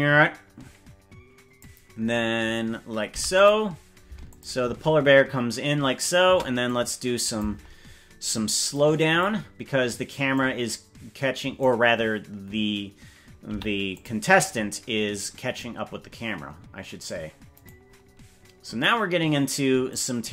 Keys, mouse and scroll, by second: 3.0 i, 4.3 click, 4.6 space, 6.2 space, 6.6 click, 8.7 click, 10.3-11.6 drag, 13.4 i, 15.4-15.9 scroll down 3, 15.9-16.5 scroll up 2, 16.6-17.0 scroll down 1, 17.6-18.6 right drag, 19.9 click.